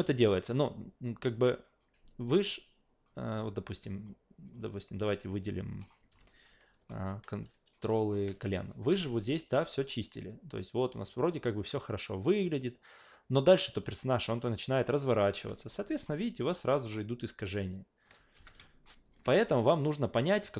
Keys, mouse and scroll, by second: 4.0 click, 4.4 click, 5.8 click, 6.1 a, 6.9-7.3 alt+middle drag, 7.4 alt+right drag, 7.9 alt+middle click, 8.5 alt+right click, 9.5-15.2 drag, 15.6 alt+middle drag, 15.9 alt+right click, 16.1-16.9 alt+drag, 17.4-18.0 alt+drag, 18.3 q, 19.0 shift+click.